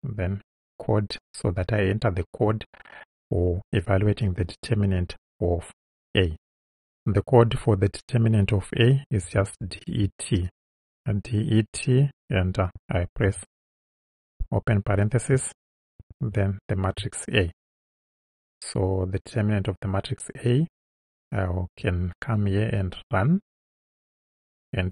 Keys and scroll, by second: 9.3 d, 9.7 e, 13.3 shift+9, 16.0 shift+a, 18.2 Right.